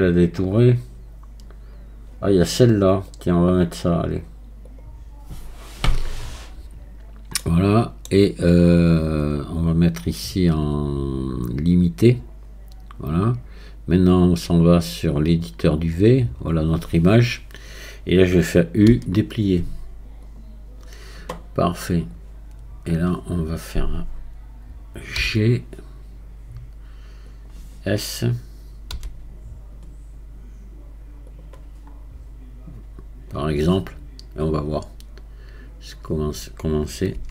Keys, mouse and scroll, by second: 6.3-8.5 scroll up 1, 8.5-10.1 scroll down 1, 10.1-13.1 drag, 14.1-15.9 drag, 15.9-18.9 scroll down 4, 18.9 u, 22.1-25.1 drag, 31.9 scroll down 2, 37.2 Tab.